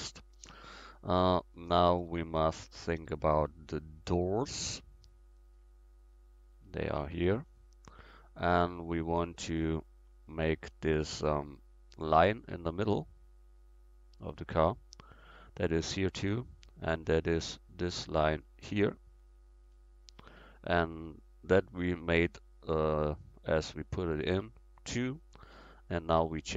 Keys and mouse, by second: 1.3-2.3 middle drag, 7.5-8.8 right drag, 11.6 middle click, 11.8-12.1 middle drag, 17.9-18.8 right drag.